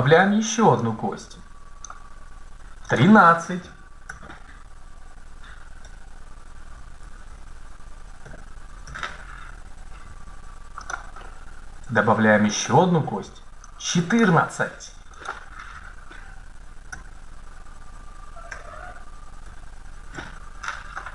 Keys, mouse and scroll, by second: 1.2-2.4 drag, 2.8 click, 3.9 Tab, 6.8 BackSpace, 8.0 KP_3, 8.7 Tab, 14.3 click, 16.7 Tab.